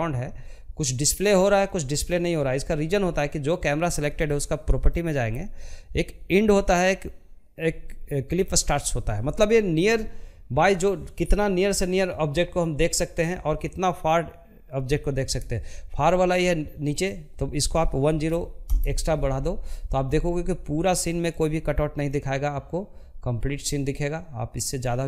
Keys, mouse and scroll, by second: 0.8-18.3 drag, 19.9-23.3 drag.